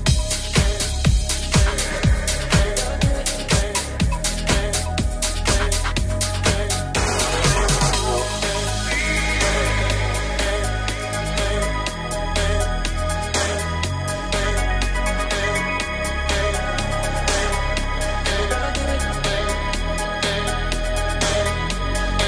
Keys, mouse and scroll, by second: 2.6 right click, 2.6-4.5 middle drag, 2.8 Tab, 4.2 3, 4.5 right click, 4.5-22.2 middle drag, 5.4 /, 7.7 right click, 8.5 shift+right click, 9.1 shift+right click, 9.4 shift+right click, 9.9 shift+right click, 10.3 shift+right click, 19.1 g, 20.5 e.